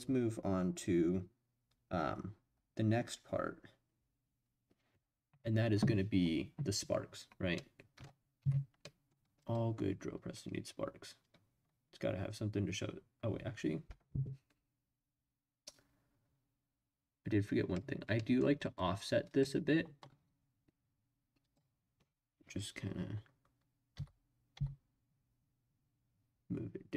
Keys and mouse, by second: 7.6 middle click, 8.4 Tab, 8.8 middle drag, 9.4 click, 11.2-17.7 drag, 18.2 middle click, 21.4 click, 23.9 g, 24.5 y.